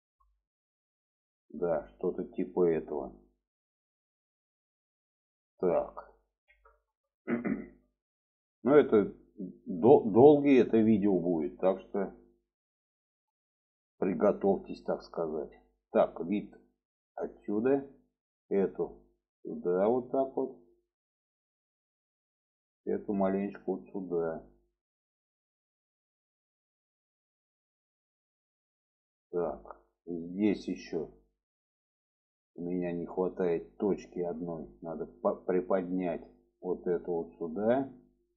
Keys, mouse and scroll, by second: 0.3 shift+middle click, 1.2 shift+middle click, 3.6 alt+z, 4.1 middle click, 4.9-6.0 middle drag, 6.7 shift+middle click, 7.5 shift+middle click, 8.5 middle click, 10.3 shift+middle click, 11.6 middle click, 12.3-14.5 middle drag, 14.9 alt+middle click, 16.3 shift+middle click, 18.5 click, 19.1 click, 23.2 click, 25.5 click, 27.1-27.7 middle drag, 27.8-28.2 shift+middle drag, 28.6-29.4 alt+middle drag, 29.7 shift+middle drag, 30.6 shift+middle drag, 33.6 click, 34.0 shift+middle drag, 35.5-37.4 drag.